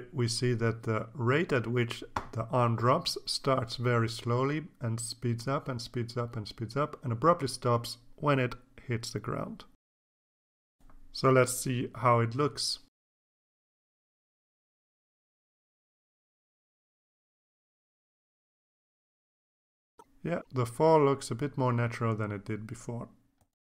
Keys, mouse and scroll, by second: 1.4-5.9 drag, 11.9 click, 13.5-21.3 drag, 22.3 click, 22.7 click.